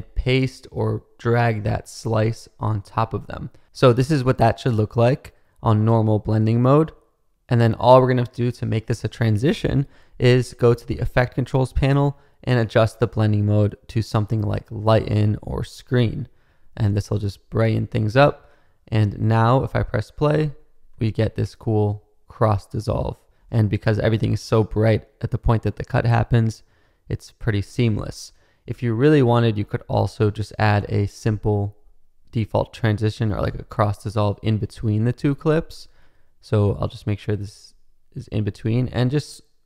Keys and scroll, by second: 20.9 space, 23.4 space, 27.7 space, 29.5 space.